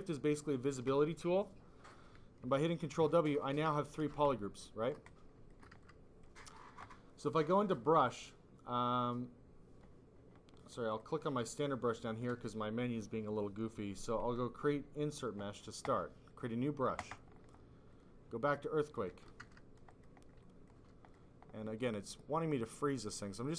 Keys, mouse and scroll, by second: 2.4 ctrl+w, 3.1 ctrl+click, 3.9 alt+click, 4.2 click, 5.0 click, 5.7 alt+click, 7.6 click, 10.8 click, 15.0 click, 15.2 click, 16.2 click, 17.8 click, 18.5 click, 19.1 f, 19.5 alt+click, 19.9 click, 20.3 click, 21.0 click, 21.7 click, 21.9 click, 22.5 click.